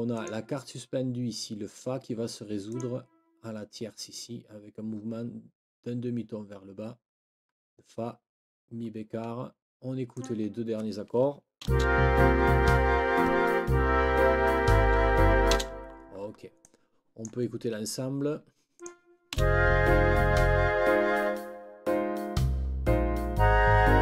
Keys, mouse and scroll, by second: 0.1 click, 2.7 click, 10.1 click, 11.6 space, 15.5 space, 16.6 click, 16.8 click, 18.8 click, 19.3 space.